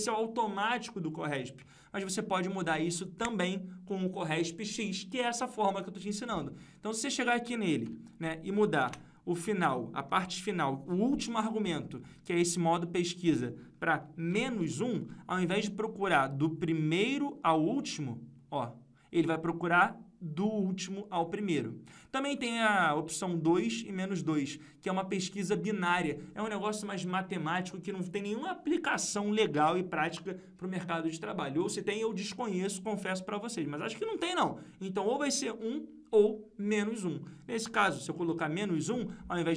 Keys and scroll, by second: 7.8 F2.